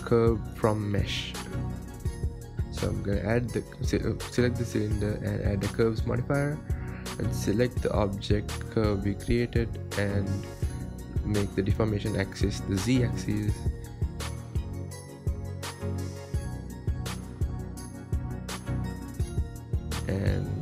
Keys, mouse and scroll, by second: 3.3 Tab, 3.9-4.2 scroll down 1, 4.2 shift+middle click, 4.6-5.4 scroll up 8, 5.4 Tab, 5.7-6.1 scroll down 3, 6.1-7.0 shift+middle drag, 7.0 click, 7.7-9.4 drag, 10.4-11.6 drag, 11.6-12.2 scroll down 4, 12.9 click, 13.7 scroll up 6, 14.5-15.1 scroll up 1, 15.1-17.1 right drag, 17.1 scroll down 2, 18.1 click, 19.7 ctrl+2.